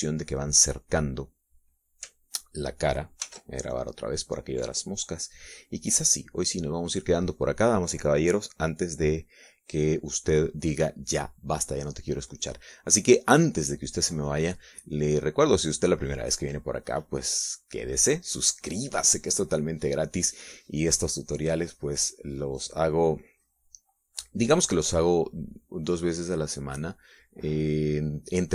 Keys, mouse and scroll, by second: 4.8 ctrl+s, 5.3 ctrl+click, 7.6 click, 8.5 click, 17.9 click, 18.6 click, 19.6 click, 21.4 click, 23.0-24.7 drag, 25.7 click, 27.0-28.5 drag.